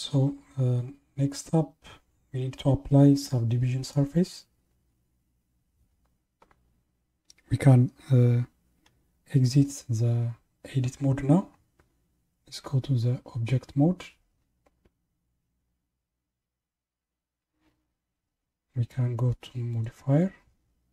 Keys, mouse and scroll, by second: 13.6 Tab, 19.7 click.